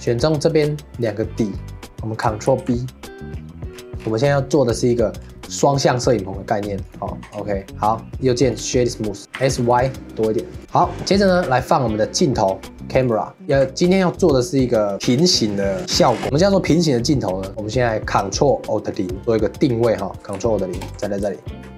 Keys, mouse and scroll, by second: 0.0 click, 0.3 middle click, 0.9 shift+click, 1.2 middle click, 1.6 scroll up 1, 1.8 middle click, 2.5 ctrl+b, 7.2 Tab, 7.6 middle click, 7.7 click, 8.1 right click, 8.9-9.4 middle drag, 9.4 s, 10.6-11.4 shift+middle drag, 11.4 shift+a, 13.4 middle click, 13.5 ctrl+s, 16.2 ctrl+s, 19.3-20.7 middle drag, 20.7 ctrl+alt+KP_0, 21.4-21.7 shift+middle drag.